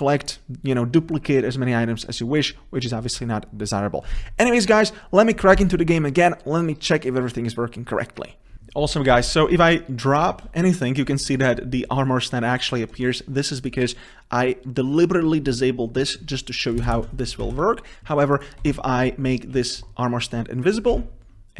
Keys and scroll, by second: 8.6 ctrl+s, 17.7 ctrl+s.